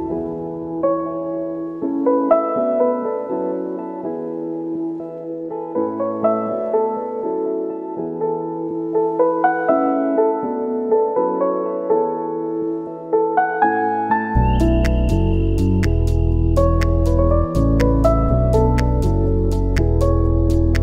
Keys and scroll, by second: 2.6 ctrl+a, 6.6 u, 9.9-11.0 typing, 11.1 Down, 12.0 Return, 12.4 ctrl+a, 12.6 ctrl+c, 13.4 Return, 15.8 ctrl+v, 15.9 Return, 17.2 ctrl+v, 17.3 Return, 18.4 ctrl+v, 18.6 Return, 20.5 Return.